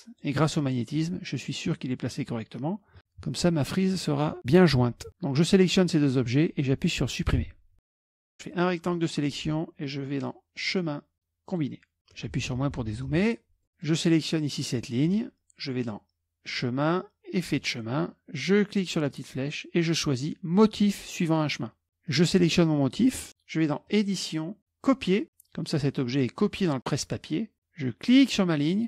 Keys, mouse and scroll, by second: 1.0 click, 3.0 click, 3.7 shift+click, 7.4 Delete, 7.9 KP_Subtract, 8.5 click, 10.6 click, 11.5 click, 12.4 KP_Subtract, 12.5 KP_Subtract, 12.7 KP_Subtract, 12.8 KP_Subtract, 13.1 KP_Subtract, 13.1 KP_Subtract, 13.7 click, 16.5 click, 17.5 click, 19.1 click, 22.1 click, 23.3 click, 23.9 click, 24.9 click, 28.1 click.